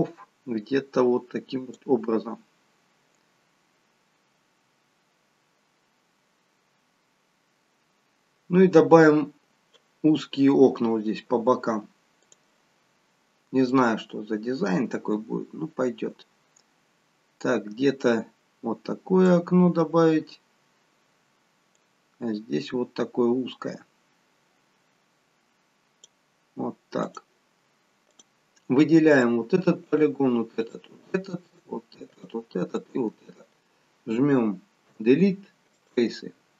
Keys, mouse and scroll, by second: 12.3 click, 13.7 click, 21.8 click, 27.1 click, 29.2 click, 30.0 shift+click, 30.2 shift+click, 32.2 shift+click, 35.0 Delete.